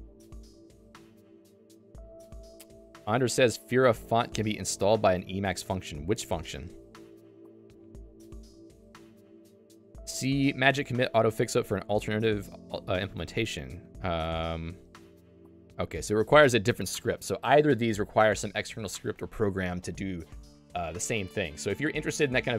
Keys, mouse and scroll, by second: 6.9 super+1.